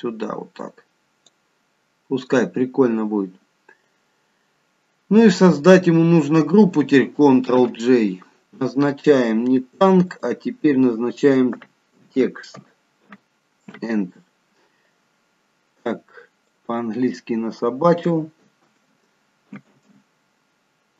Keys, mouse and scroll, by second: 7.5 ctrl+g, 10.2 click, 16.5 click, 19.7 BackSpace.